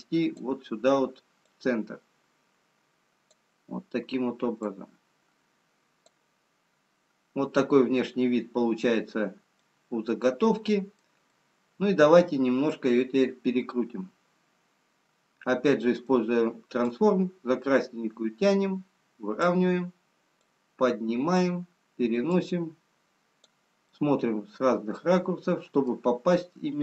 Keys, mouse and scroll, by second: 5.3 click, 6.7 scroll up 3, 7.8-8.3 scroll up 1, 9.7 middle click, 9.7-10.0 scroll up 1, 19.1 click, 20.5 click, 23.9 middle click.